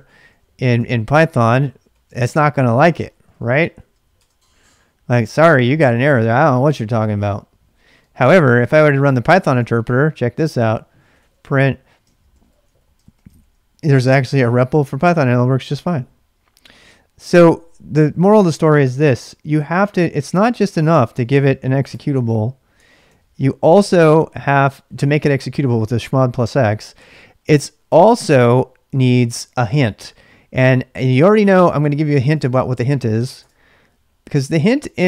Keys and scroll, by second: 0.0-4.6 typing, 8.1-9.4 typing, 10.7-13.3 typing, 14.2 Return, 20.4 q, 21.6-24.2 typing, 31.2-32.4 typing, 33.3 Return, 34.2 k, 34.4 k, 34.8 k, 34.9 k.